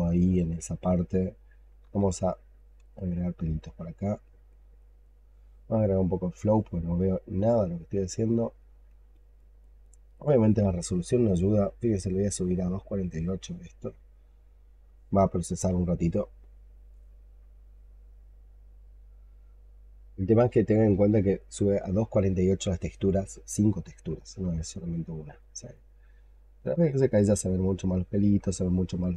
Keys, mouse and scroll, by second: 2.5 double click, 2.8 double click, 3.1 double click, 3.4 double click, 3.8 double click, 4.1 double click, 4.4 double click, 4.7 double click, 4.9 double click, 7.3 double click, 7.7 double click, 8.1 double click, 8.5 double click, 8.7 double click, 9.0 double click, 9.2 double click, 9.5 double click, 9.7 double click, 10.0 double click, 25.3 double click, 25.6 double click, 25.9 double click, 26.4 double click, 26.7 double click, 27.0 double click, 27.3 double click, 27.6 double click, 28.4 alt+click.